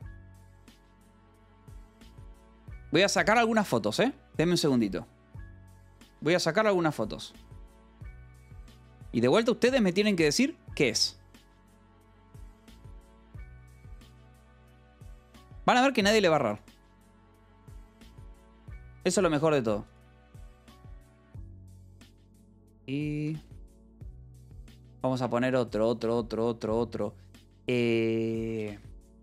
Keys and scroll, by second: 11.9 a, 12.2 Return, 22.7-24.5 typing, 28.0-29.2 typing.